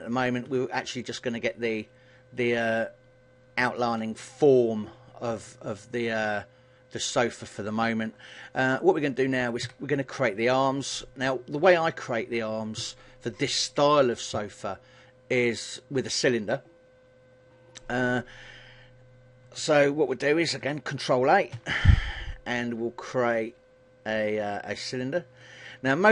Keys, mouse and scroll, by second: 0.5 KP_1, 9.7 a.